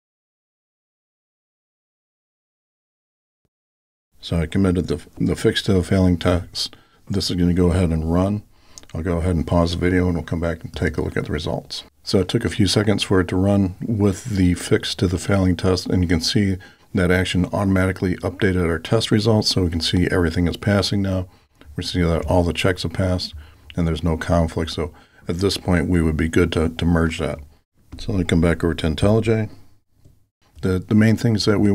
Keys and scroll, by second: 1.3 alt+super+k.